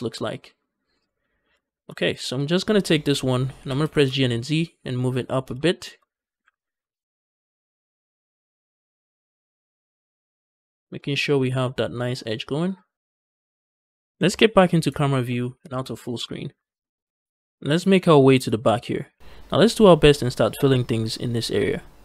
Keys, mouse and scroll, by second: 1.5 shift+middle click, 2.2 click, 2.6 middle click, 3.4 g, 3.7 z, 5.2 shift+click, 5.5 shift+middle click, 5.9 middle click, 6.5 z, 7.1 shift+click, 7.4 middle click, 7.8 shift+middle click, 8.1 scroll up 1, 8.3-10.4 middle drag, 10.5 shift+middle click, 10.8-12.2 middle drag, 12.8 click, 14.0 KP_0, 15.5 ctrl+space, 17.1 scroll down 3, 17.2 shift+middle click, 17.8 scroll up 2, 18.1 shift+middle click, 18.4-19.2 scroll up 1.